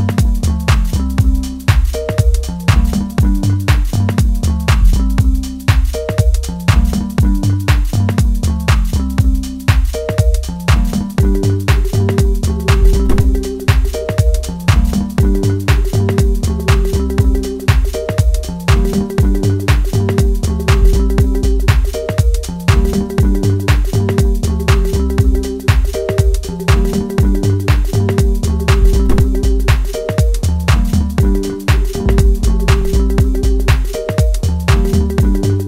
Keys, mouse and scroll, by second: 1.6 click, 3.8 click, 17.0 right click, 20.2 click, 21.2 middle click, 22.0 scroll down 1, 22.6-23.9 middle drag, 23.9-24.6 scroll down 1, 24.6-29.0 middle drag, 29.0 click, 31.7 shift+middle click, 32.8 click, 34.0-35.6 middle drag.